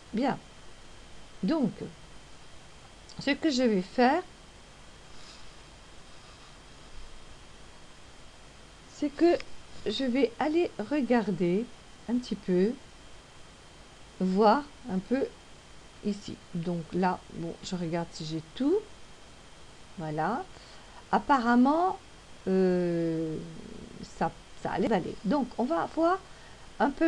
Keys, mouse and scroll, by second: 2.2 click, 13.2 click, 26.1 click.